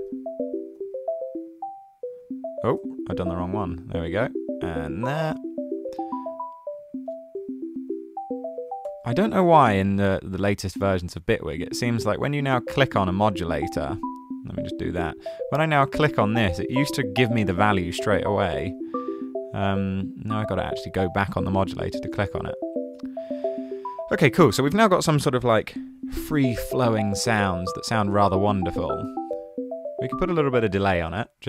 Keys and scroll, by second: 0.1 super+c, 2.8 super+z, 8.5-9.2 typing, 11.4 super+c, 12.1 super+v, 20.4-21.3 typing, 29.1 d, 30.5-31.4 typing.